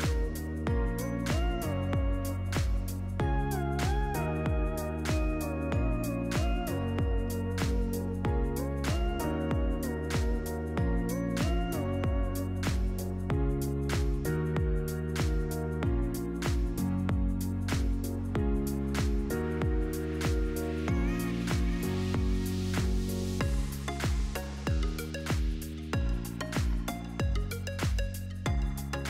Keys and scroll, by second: 11.8-15.6 typing, 18.1 1, 18.5 Tab, 18.6 1, 18.9 Return, 20.8 1, 22.2 BackSpace, 22.3 0, 22.9 Return, 25.7 1, 26.6 Return.